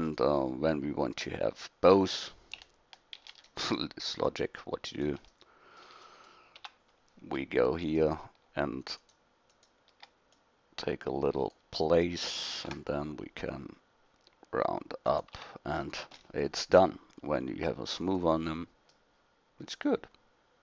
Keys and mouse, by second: 3.2 shift+d, 5.3-6.0 middle drag, 6.6 Tab, 7.8-11.5 middle drag, 12.5 ctrl+b, 15.3 Tab, 20.1 middle click.